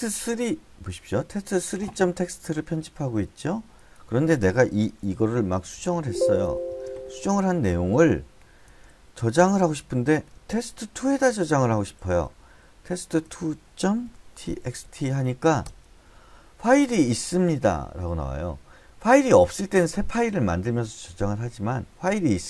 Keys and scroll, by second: 5.9-7.6 typing, 8.9-15.3 typing, 16.1 Return, 17.1 typing.